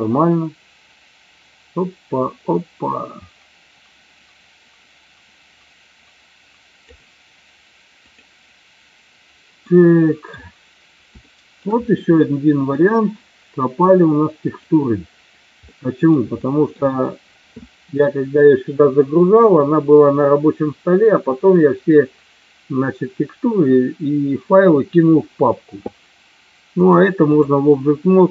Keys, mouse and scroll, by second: 8.4 click, 9.6 middle click, 11.4 shift+middle click, 12.3 middle click, 15.6-16.3 middle drag, 16.5 shift+middle drag, 26.8-27.5 drag.